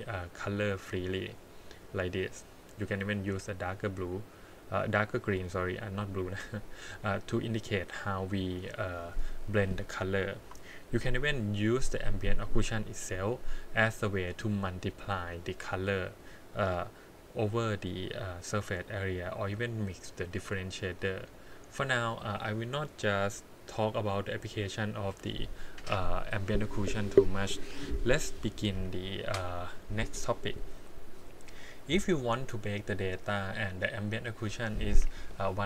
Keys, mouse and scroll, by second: 0.0 click, 8.0-9.6 middle drag, 10.4 KP_1, 11.8 click, 18.9 scroll down 4, 19.3 middle click, 20.0 click, 21.0 click, 21.5 middle click, 22.4-24.5 middle drag, 22.7-24.0 scroll up 2, 24.5 click, 31.4 middle click.